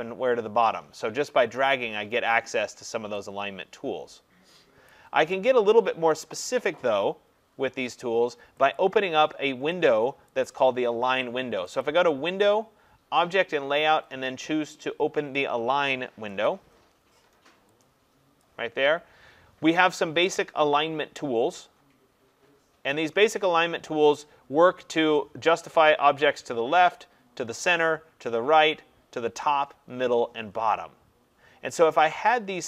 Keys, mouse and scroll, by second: 1.6 click, 4.9 click, 8.8 click, 10.3 click, 11.8 click, 16.5 click, 18.4 click.